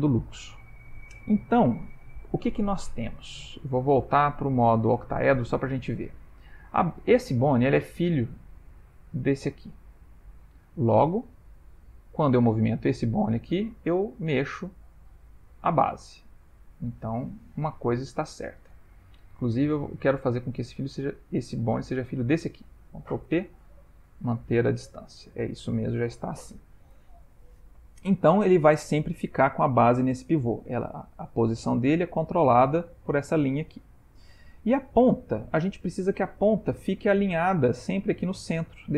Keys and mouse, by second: 2.8 ctrl+middle click, 4.5 click, 6.0 ctrl+middle click, 10.1 middle click, 11.3 Tab, 11.8 Tab, 12.2 click, 12.8 r, 18.0 shift+middle click, 19.5 Tab, 20.1 click, 22.1 shift+click, 23.3 ctrl+p, 25.3 Tab, 34.0 middle click.